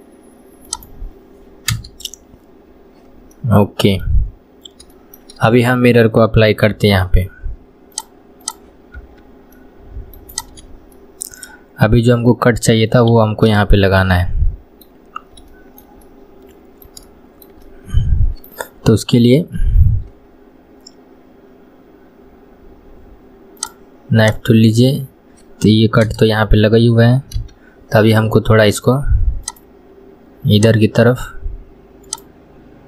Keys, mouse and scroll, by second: 3.4-6.8 middle drag, 6.8 Tab, 8.0-9.0 drag, 9.0 Tab, 9.6-10.4 middle drag, 10.4 click, 11.0-13.2 shift+middle drag, 13.2 KP_1, 13.6-15.1 shift+middle drag, 15.1-15.5 scroll down 1, 15.5-19.2 shift+middle drag, 19.2 k, 27.4 k.